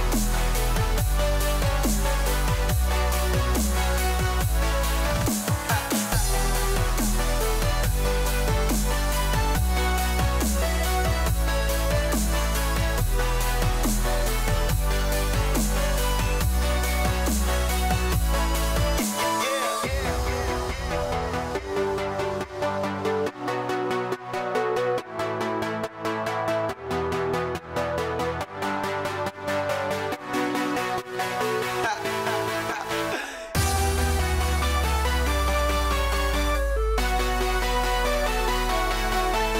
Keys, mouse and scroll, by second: 6.9-13.0 drag, 13.0 Tab, 19.1 e, 25.1 s, 30.9 e, 36.6-39.5 shift+middle drag.